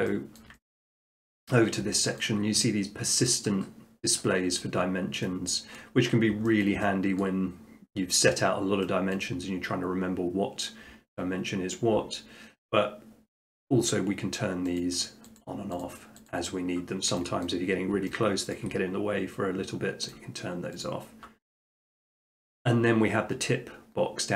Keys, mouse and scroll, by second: 0.4 shift+middle click, 0.8 middle click, 1.2 shift+middle click, 1.5 middle click, 1.6 middle click, 2.2 shift+middle click, 5.2 middle click, 5.8 middle click, 6.1 middle click, 6.6 shift+middle click, 7.2 middle click, 9.2 middle click, 14.8 click, 17.5 middle drag, 17.8 middle click, 18.6 shift+middle click, 20.1 click, 21.0 click, 21.5 middle click, 21.7 middle click, 22.3 shift+middle click.